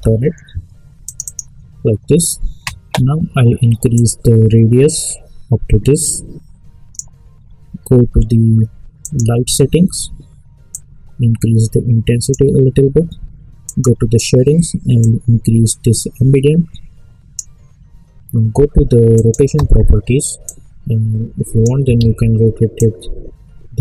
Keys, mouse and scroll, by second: 0.0-0.3 typing, 1.0 click, 3.9-21.9 drag, 21.9 ctrl+z, 22.7-23.8 drag.